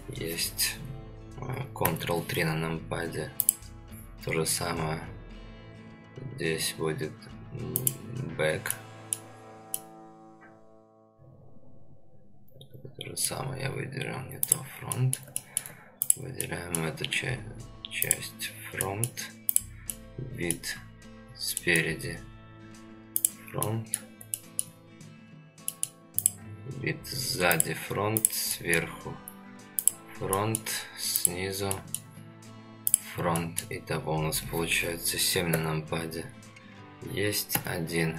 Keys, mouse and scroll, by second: 1.9 ctrl+KP_3, 3.4 click, 7.8 click, 8.7-9.2 middle drag, 9.3 scroll down 2, 9.7-13.3 middle drag, 14.4 click, 14.9 middle click, 15.4 shift+middle drag, 16.0 click, 16.4-16.8 middle drag, 18.0 click, 18.8 middle click, 19.5 click, 19.9-20.5 middle drag, 20.7-21.0 scroll up 2, 21.2-21.5 scroll down 2, 21.5 middle drag, 23.1 click, 23.6-23.9 middle drag, 24.3-24.6 shift+middle drag, 25.2-25.7 scroll down 2, 25.7 middle click, 26.2 click, 27.6 click, 28.2 click, 28.5 middle drag, 29.8 click, 30.3 middle drag, 31.2 click, 31.7 middle drag, 32.9 click, 33.4 middle drag, 34.2-34.7 scroll down 1, 35.5 KP_7, 37.5 KP_1.